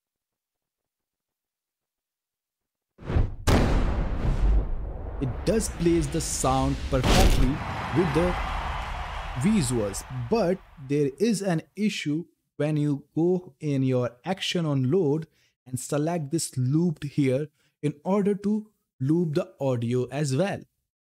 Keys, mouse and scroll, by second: 13.2 click, 16.7 click.